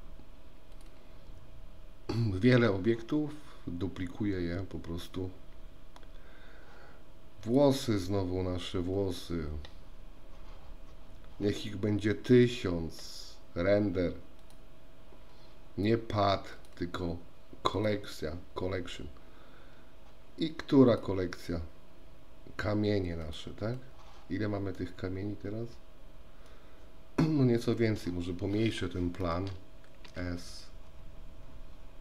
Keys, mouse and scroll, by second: 0.7 click, 14.4 click, 16.7-17.9 drag, 20.9-23.9 drag, 24.9-28.3 middle drag, 30.2 s.